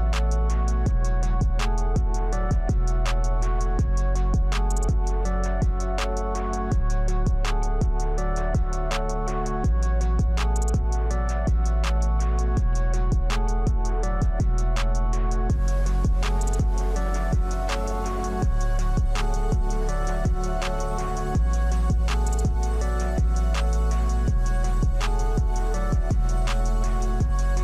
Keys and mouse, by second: 0.1 KP_1, 0.4 shift+z, 0.6 Tab, 0.8 Tab, 0.9 click, 1.0 click, 1.2 Tab, 1.3 Tab, 1.5 Tab, 1.7 click, 2.7 click, 3.2 s, 3.8 click, 5.2 click, 6.0 ctrl+s, 6.1 ctrl+r, 6.9 Tab, 7.2 shift+z, 7.8 middle click, 9.0 Tab, 9.2 middle click, 10.1 click, 11.7 alt+shift+click, 12.4 middle click, 14.2 middle click, 14.9 alt+shift+click, 15.2 alt+shift+click, 15.7 middle click, 16.2 alt+shift+click, 17.1 middle click, 18.1 alt+shift+click, 18.5 middle click, 19.0 alt+shift+click, 19.3 alt+shift+click, 19.8 middle click, 20.3 alt+shift+click, 20.6 alt+shift+click, 21.6 ctrl+z, 21.9 alt+shift+click, 22.3 middle click, 24.1 click, 26.8 click.